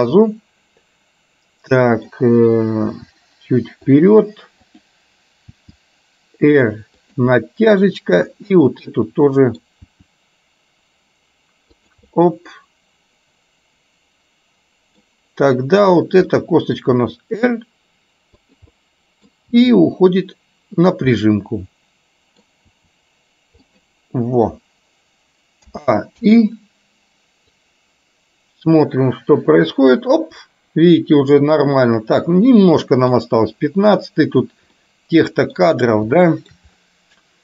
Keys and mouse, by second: 0.2-2.1 middle drag, 3.0 r, 4.8 click, 5.7 r, 7.3 middle click, 8.6 click, 9.2 middle click, 10.0 r, 12.2-15.1 middle drag, 15.8 click, 16.5 middle click, 17.1 r, 18.8 middle click, 19.7 r, 21.2-22.5 middle drag, 22.8 r, 25.8 a, 26.3 i, 27.7-33.3 drag, 34.8 middle click, 36.2 shift+middle click.